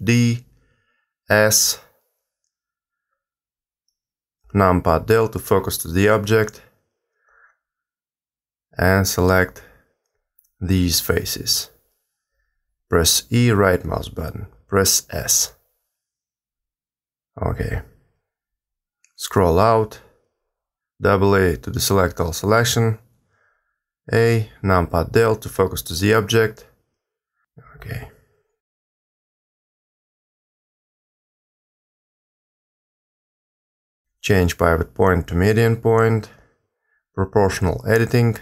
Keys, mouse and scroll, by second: 0.4 shift+d, 2.1 s, 6.0 KP_Decimal, 6.9-8.7 scroll down 5, 8.8 click, 9.8 shift+click, 11.2 click, 11.7 shift+click, 13.2 shift+click, 14.3 shift+click, 15.1 e, 17.8 s, 20.5-23.2 scroll down 8, 23.2 a, 23.4 a, 23.8 a, 24.4 KP_Decimal, 25.4-27.2 scroll up 2, 29.5 middle click, 31.9 a, 32.0 a, 34.2 click, 38.2 click.